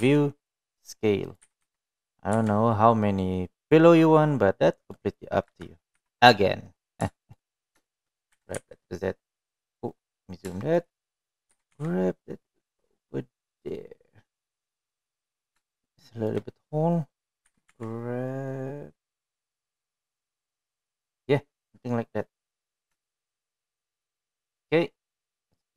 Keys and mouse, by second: 0.3 KP_7, 1.6 s, 3.0 g, 5.7-6.6 middle drag, 7.1 KP_1, 7.6 KP_3, 8.7 shift+middle drag, 9.5 shift+middle drag, 10.0 g, 12.2 shift+middle drag, 13.2 g, 17.3-18.0 shift+middle drag, 19.6 g, 24.0-24.5 middle drag, 24.8 shift+middle drag, 25.1 middle drag.